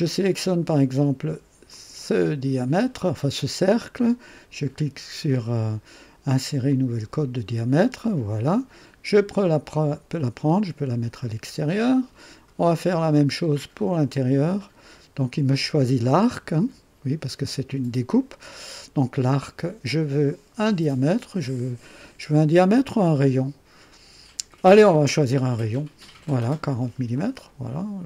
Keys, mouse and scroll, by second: 1.7 click, 6.7 click, 9.3-11.8 drag, 14.5 click, 25.7 click, 27.1-28.0 drag.